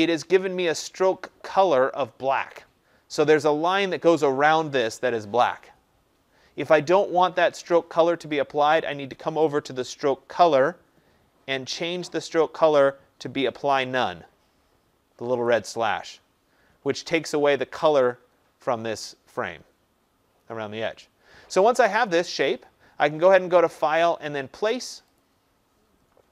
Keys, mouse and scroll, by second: 0.3-5.4 drag, 15.4-20.6 drag, 23.3 click, 25.1 click.